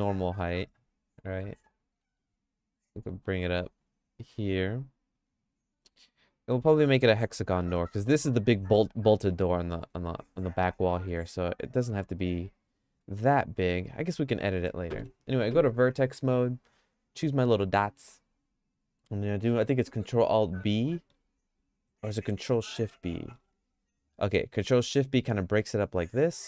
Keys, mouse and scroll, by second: 0.5 shift+middle click, 2.0 g, 7.6 middle click, 8.0-9.9 shift+middle drag, 10.9 middle click, 11.4-13.3 shift+middle drag, 15.0 1, 20.8 ctrl+alt+b, 23.0 ctrl+shift+b.